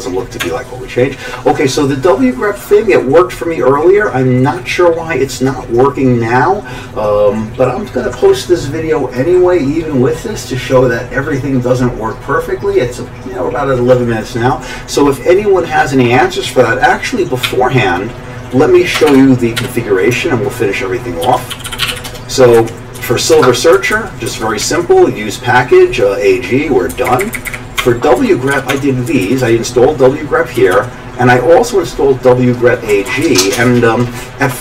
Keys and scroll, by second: 0.4 Tab, 17.4 q, 19.0 Escape, 19.1 Escape, 19.6 c, 21.2 ctrl+s, 21.3-22.4 typing, 22.6 Right, 23.0 Down, 23.3 Tab, 23.7 Down, 23.9 Down, 24.3 Down, 24.6 Down, 26.9 Up, 27.1 Up, 27.3 Up, 27.3-29.1 typing, 27.5 Up, 28.5 Home, 28.7 Tab, 29.1 Down, 29.2 Down, 30.6 Down, 30.6 typing, 30.7 Down, 32.9 Down, 33.1 Down, 33.2 Down.